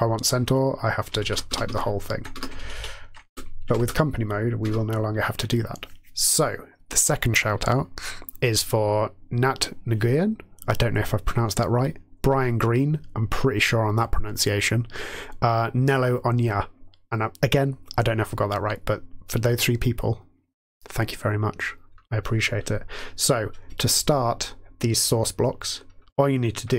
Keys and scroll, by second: 0.0-0.2 typing, 1.1 ctrl+a, 1.4 BackSpace, 1.6 BackSpace, 2.3 BackSpace, 2.5 Down, 2.7 Down, 3.2 Return, 3.6 Tab, 3.7 Return, 4.6 BackSpace.